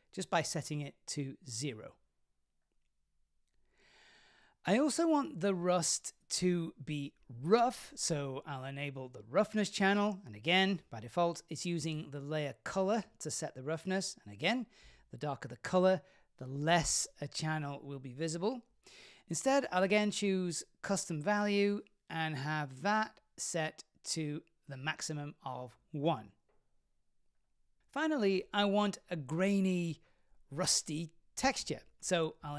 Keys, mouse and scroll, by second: 0.2-2.8 drag, 4.7 click, 10.1 click, 12.0-17.5 drag, 18.4 click, 20.9-22.0 drag, 23.3-26.2 drag, 27.8-28.6 middle drag, 27.8-28.3 scroll down 1.